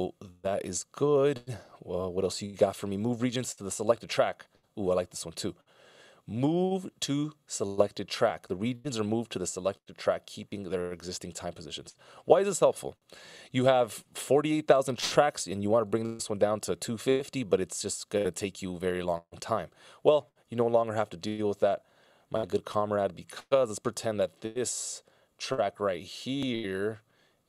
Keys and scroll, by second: 14.0 Delete.